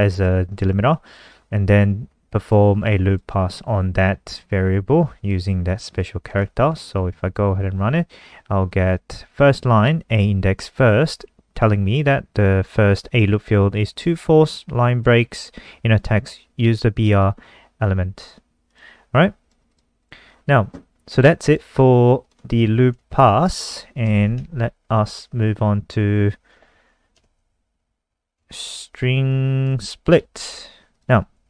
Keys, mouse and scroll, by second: 6.9 ctrl+s, 7.2 F5, 14.3 click, 19.5 alt+click, 19.9 click, 20.2 click, 20.5-21.7 scroll down 2, 21.7 click, 21.9 scroll up 7, 22.5 click, 23.0 Down, 23.4 ctrl+shift+Home, 24.1 Down, 24.4 ctrl+shift+End, 27.2 Left, 27.7 ctrl+shift+Left, 28.0 ctrl+shift+Left, 31.1 click.